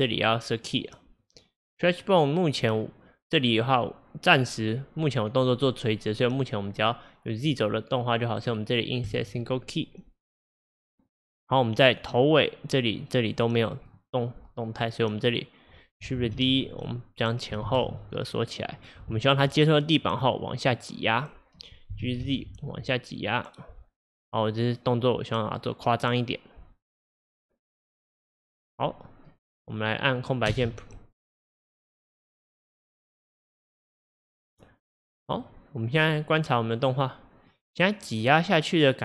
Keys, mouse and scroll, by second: 6.5-7.5 drag, 8.4-10.9 right drag, 10.9-13.9 drag, 15.4-16.4 drag, 16.4 shift+d, 17.7 shift+d, 19.5-22.0 drag, 22.0 g, 30.5 space, 35.0-38.4 middle drag.